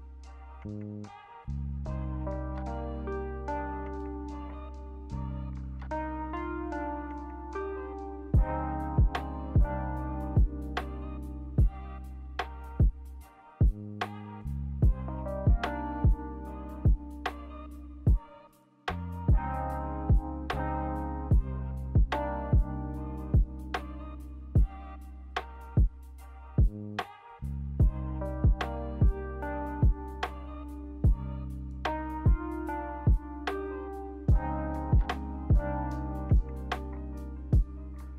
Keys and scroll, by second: 0.1 a, 19.6-20.6 typing, 36.6 ctrl+h.